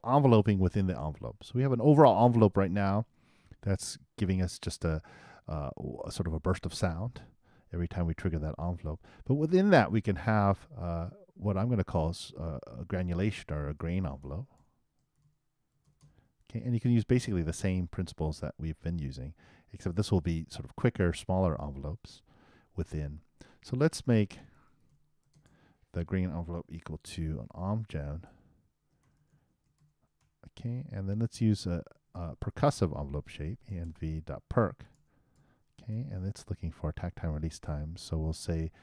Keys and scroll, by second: 27.4-30.7 typing, 32.1 shift+space, 32.4 shift+e, 35.4-36.4 typing.